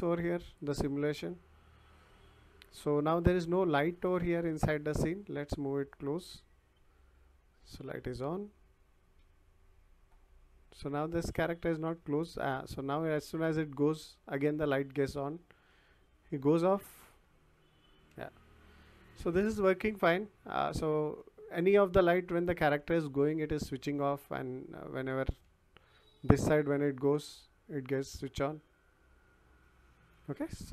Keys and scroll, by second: 3.4 w, 8.0 w, 11.0 w, 14.9 s, 16.3 w, 18.1 s, 20.3 w, 21.9 s, 23.0 w, 24.4 s, 25.4 d, 25.8 w, 28.5 w.